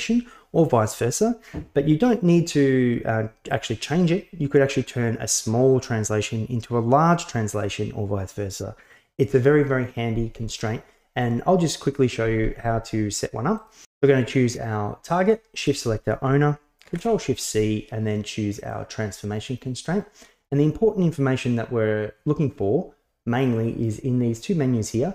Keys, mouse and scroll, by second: 13.6-15.4 drag, 15.6 shift+click, 16.9 ctrl+shift+c.